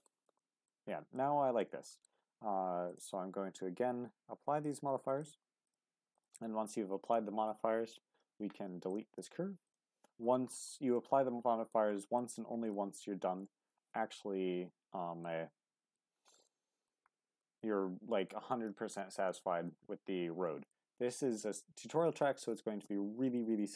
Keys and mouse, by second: 0.1 Tab, 0.4 middle drag, 1.2-1.6 middle drag, 1.9 shift+middle click, 2.8-3.2 drag, 4.7-5.3 drag, 5.7-10.1 drag, 10.1 Tab, 10.6-11.7 middle drag, 12.2 middle click, 15.2-16.0 middle drag, 16.5-16.9 shift+middle drag, 17.4-18.3 middle drag, 19.3 shift+middle click.